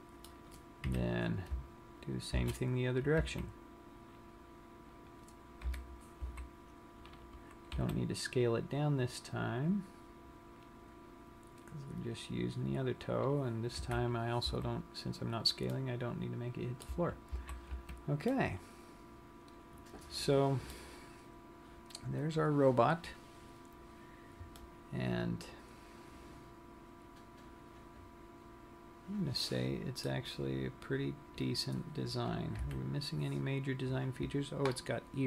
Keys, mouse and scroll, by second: 1.0 KP_1, 2.9 shift+d, 5.6 click, 5.9 KP_7, 6.7 z, 8.4 r, 12.5 click, 14.1 KP_3, 14.7 z, 16.1 middle click, 16.9 z, 17.4 z, 17.8 Tab, 18.5 middle click, 21.3 scroll down 1, 22.3-24.5 scroll up 4, 24.7 middle click, 30.6 scroll down 1, 31.6-32.7 scroll up 3, 32.7 KP_3.